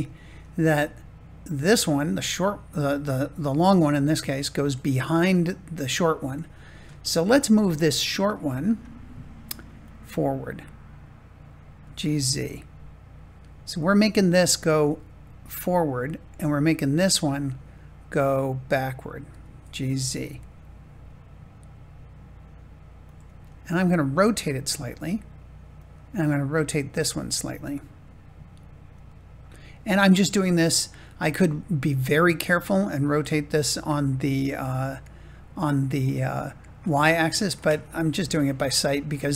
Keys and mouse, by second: 7.0 shift+middle click, 7.5 middle click, 11.8 g, 12.0 z, 15.0 middle click, 19.2 g, 19.9 z, 23.0 click, 23.8 middle click, 24.7 r, 25.7-26.7 drag, 27.1 middle click, 29.0-30.0 middle drag, 30.2 r, 35.6-37.8 drag, 37.9-39.3 middle drag.